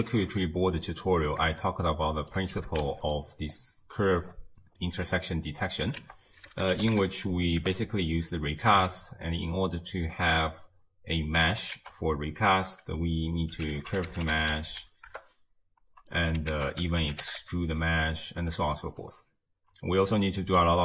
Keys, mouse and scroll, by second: 0.1-0.9 scroll up 1, 0.9 drag, 2.6 g, 3.5-4.0 scroll up 2, 4.0 middle click, 4.3-4.8 scroll up 1, 4.8 middle click, 5.1 scroll up 2, 5.5 click, 6.0 ctrl+a, 11.8 ctrl+a, 16.5 ctrl+a.